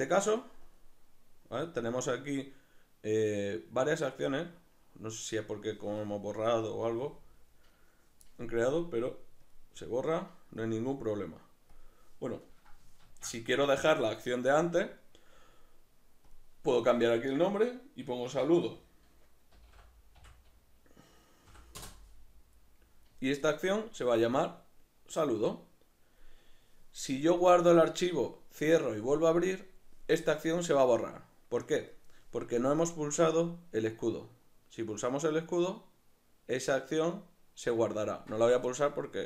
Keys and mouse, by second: 5.9 Escape, 9.5-13.1 drag, 13.1 ctrl+z, 16.3-39.2 drag, 21.8 Return.